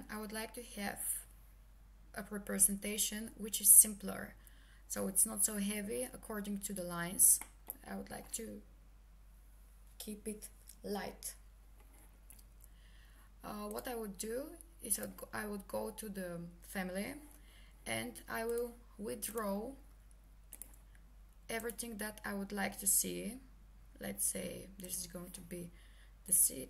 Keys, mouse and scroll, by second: 7.4 middle click, 13.7 middle click, 15.1 click, 19.3 click, 24.9 click.